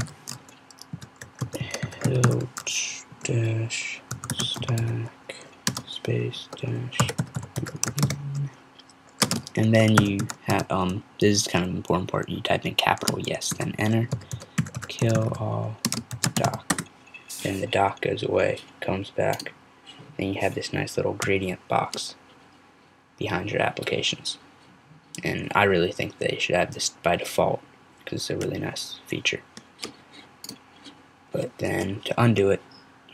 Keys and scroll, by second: 0.0-11.0 typing, 13.9-17.0 typing.